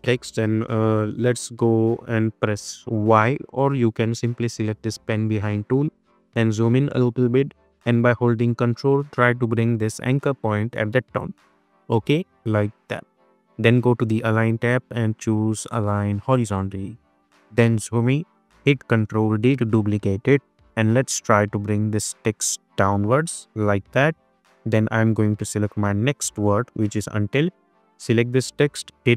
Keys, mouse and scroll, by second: 5.0 click, 6.0-6.8 alt+scroll up 1, 8.1-11.0 ctrl+drag, 17.2-17.9 alt+scroll up 1, 19.2 ctrl+d, 20.3 v, 20.8-24.2 drag, 26.1 ctrl+c, 27.2 click, 29.0 ctrl+t.